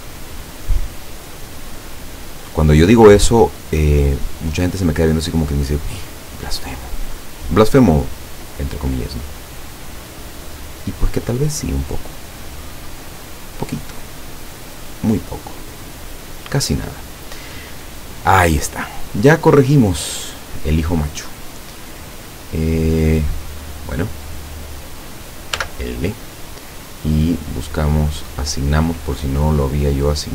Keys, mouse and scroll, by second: 0.4 middle click, 1.4 middle click, 3.0-4.5 drag, 5.1-6.7 drag, 7.2-8.6 drag, 9.0-11.4 drag, 12.1 right click, 12.9-14.1 drag, 14.6 right click, 15.1-16.9 drag, 17.3 right click, 17.8 scroll down 1, 18.4 middle click, 19.2-19.7 scroll down 1, 20.0 middle click, 20.8 scroll up 1, 21.4 scroll down 2, 21.9-22.9 drag, 23.5 right click, 23.9-24.3 scroll up 2, 25.6 l, 26.8 scroll down 2, 27.6 click, 28.1 click, 28.7 scroll down 1, 29.3 middle click.